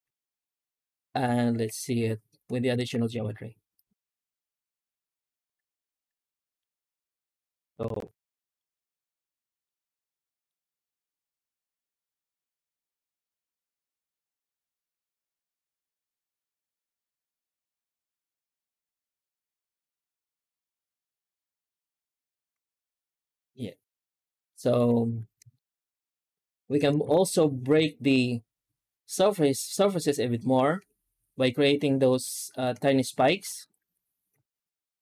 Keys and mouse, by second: 1.5 alt+h, 2.6 alt+shift+z, 6.1-6.5 middle drag, 6.6 alt+shift+z, 7.2-7.5 middle drag, 8.4 middle drag, 9.4 middle drag, 10.2 middle drag, 11.3 middle drag, 12.1 middle click, 14.1-21.5 drag, 22.4 z, 24.3 middle drag, 25.0 ctrl+space, 25.4 shift+middle drag, 26.2 right click, 26.5 Tab, 26.9 alt+shift+z, 27.6 a, 30.1 Tab, 30.7 Tab, 31.8 middle click, 32.4 shift+middle click, 33.2 Tab, 33.6 shift+q.